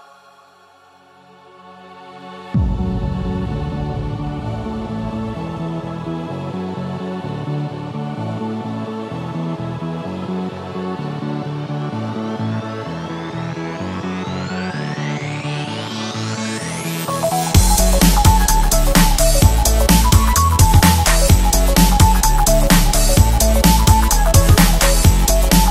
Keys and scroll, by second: 0.4 super+z, 6.0 a, 7.3 space, 7.8 super+space, 7.8 super+space, 13.8 u, 15.2 space, 15.7 alt+super+space, 15.8 alt+super+space, 16.0 alt+super+space, 16.6 a.